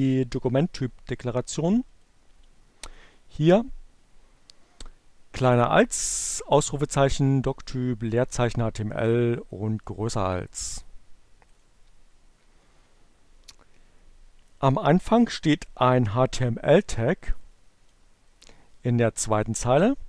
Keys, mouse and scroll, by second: 1.7 click, 10.0-11.5 drag, 16.9 click, 18.0-19.1 drag.